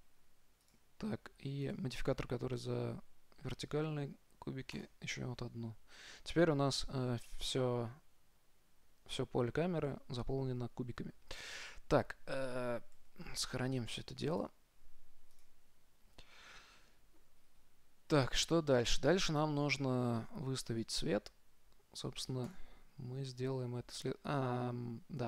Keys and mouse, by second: 0.9-3.7 drag, 5.0-6.7 drag, 15.8 ctrl+s, 15.8-17.5 drag, 17.4-21.8 middle drag, 22.7-24.5 drag.